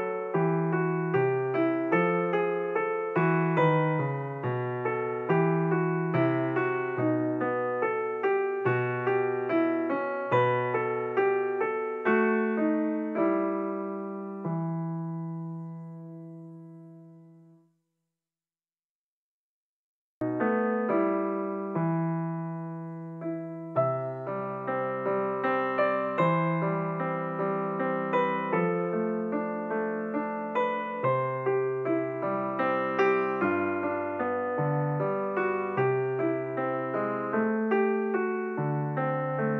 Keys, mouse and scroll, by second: 3.1-6.1 drag, 11.8-15.0 drag, 19.7-20.4 scroll up 2, 20.4 click, 21.1-21.6 scroll up 3, 21.6 click, 22.3-22.9 scroll up 1, 22.9-23.3 scroll down 2, 23.3 click, 25.3-26.6 drag, 26.6-27.2 scroll up 8, 27.6-28.2 scroll up 4, 29.5-31.2 drag, 31.2-33.5 scroll up 3, 35.9 click, 36.2-36.6 scroll down 10, 37.2 click, 39.1 click.